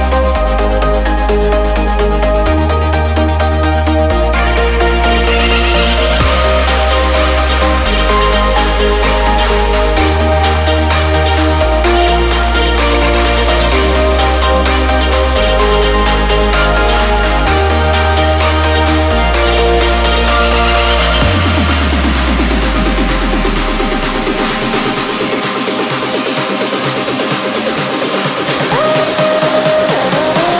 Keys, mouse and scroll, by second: 2.1-5.7 drag, 8.4 click, 12.1-17.3 drag, 17.3 click, 20.3 click, 26.7 click, 29.0 click.